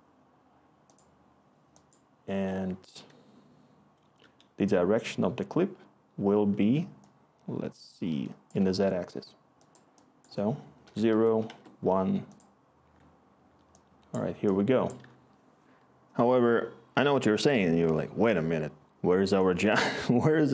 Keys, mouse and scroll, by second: 10.8 0, 11.1 Tab, 11.4 1, 11.5 Tab, 15.3 Delete.